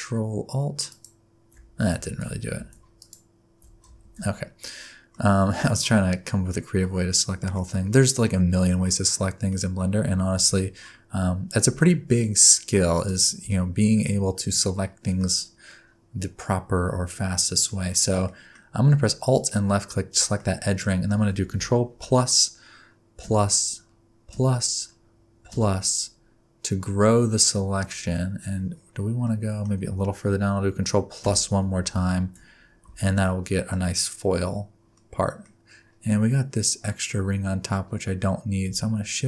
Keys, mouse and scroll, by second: 0.9 ctrl+alt+shift+click, 2.1 ctrl+z, 3.0 alt+shift+click, 4.0 ctrl+z, 5.1 middle click, 7.7 middle click, 8.2-8.9 scroll up 1, 8.9 middle click, 9.5-10.0 scroll up 4, 10.0 3, 12.9 alt+click, 13.5 middle click, 14.6-15.1 scroll down 4, 15.1 middle click, 17.9 middle click, 18.2 middle click, 18.7 scroll up 1, 19.3 alt+click, 20.3 middle click, 20.8-21.3 scroll down 1, 22.0 ctrl+KP_Add, 23.2 ctrl+KP_Add, 24.3 ctrl+KP_Add, 25.5 ctrl+KP_Add, 28.7-29.2 scroll down 5, 29.2 middle click, 31.2 ctrl+KP_Add, 32.1 alt+z, 32.8 alt+z, 33.2 middle click, 33.9-34.9 scroll up 8, 34.9 middle click, 35.8 scroll up 2, 36.4 scroll up 2, 37.4-38.0 scroll down 3, 38.0 scroll up 2.